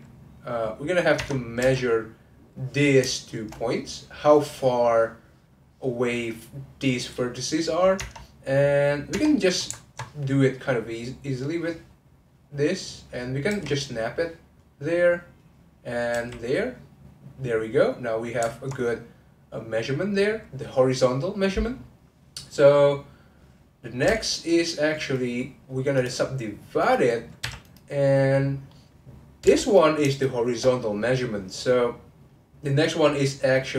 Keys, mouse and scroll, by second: 1.1 Tab, 1.6 1, 2.0 click, 3.2 shift+click, 4.5-7.5 middle drag, 7.6 middle click, 7.9 Tab, 8.3 click, 9.8 ctrl+middle click, 10.6 click, 12.4-13.5 middle drag, 13.5 g, 14.6 middle click, 15.1 click, 15.4 middle click, 16.1 g, 16.8-23.2 middle drag, 24.3 click, 25.9-27.4 right drag, 27.4 1, 27.6 click, 28.1-29.4 middle drag, 29.4 2, 29.6 click, 30.1 shift+click.